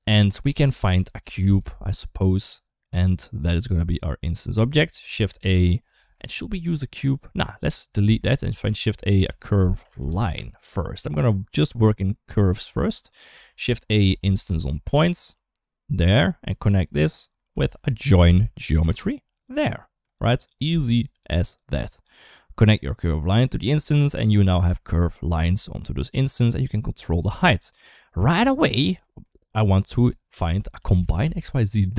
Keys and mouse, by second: 4.9 shift+a, 7.8 ctrl+x, 8.3 shift+a, 13.3 shift+a, 16.3 click, 17.4 shift+a, 19.9 click, 20.8 g, 21.5 click, 22.6 click, 24.1 middle click, 26.0 shift+click, 27.4 shift+middle click, 28.3 click, 28.9 middle click, 29.6 click.